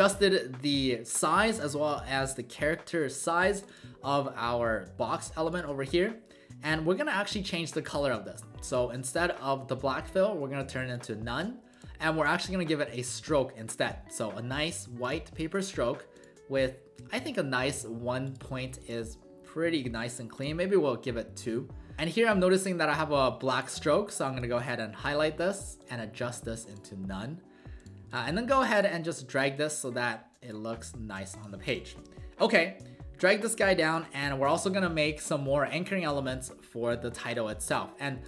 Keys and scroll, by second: 19.3 w, 19.8 w, 31.9 w.